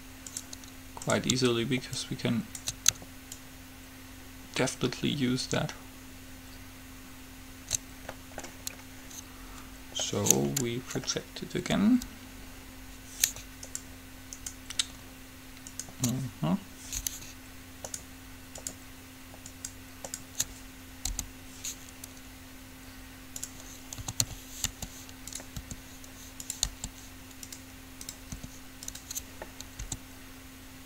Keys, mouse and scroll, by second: 0.1 middle click, 0.5-3.2 right drag, 2.1-5.4 drag, 8.4-10.7 middle drag, 13.9-17.7 right drag, 18.1-22.3 right drag, 21.4 u, 24.4 a, 24.8 g, 25.8 r, 26.9 g, 28.2 click, 28.5 r, 30.0 s.